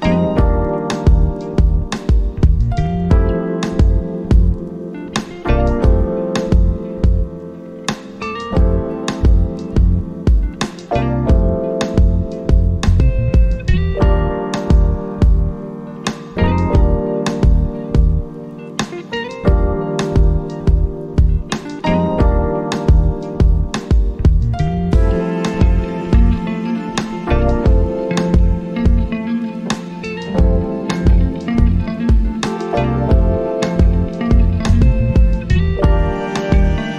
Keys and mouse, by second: 5.0 click, 5.4-8.4 drag, 8.4 ctrl+z, 9.5-20.0 drag, 20.0 right click, 21.0 click, 25.2-36.9 drag.